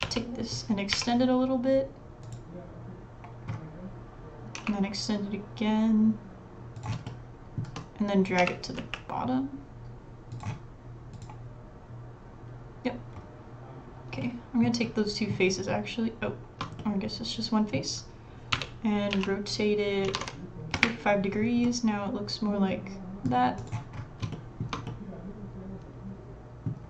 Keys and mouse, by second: 4.6 e, 7.1 shift+middle click, 14.2 middle click, 14.4 click, 14.8 click, 14.9 middle click, 15.0 click, 16.8 middle click, 17.2 click, 18.5 r, 21.6-22.7 middle drag, 22.7 click, 23.6 middle click, 24.3 shift+click, 24.9 click.